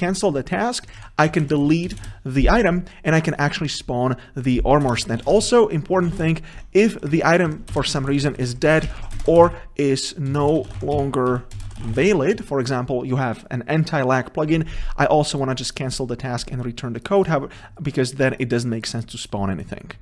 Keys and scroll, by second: 6.7 Tab, 12.1 Return.